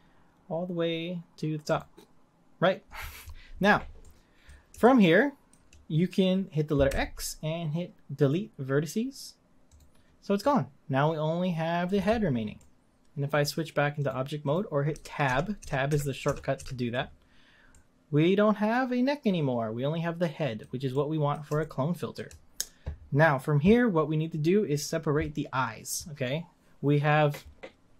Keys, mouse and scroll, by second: 4.0-6.9 middle drag, 6.9 x, 10.4-14.0 middle drag, 14.0 click, 14.9 Tab, 15.2 Tab, 15.6 Tab, 16.2 Tab, 17.1-17.7 scroll down 1, 17.7-20.7 middle drag, 20.9-24.8 middle drag.